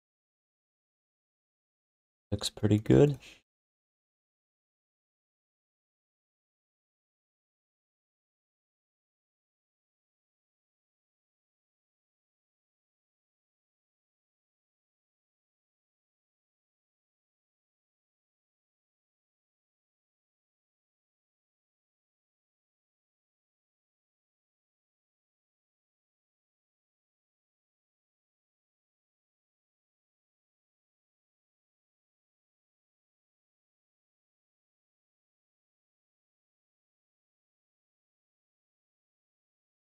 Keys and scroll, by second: 3.3 1, 4.3 q, 5.1 w, 7.0 q, 9.3 q, 10.0 r, 13.1 q, 14.3 alt+shift+d, 15.2 3, 16.0 1, 18.0 w, 21.6 r, 28.1 q, 29.8 w, 32.5 q, 33.3 r, 35.5-36.4 typing.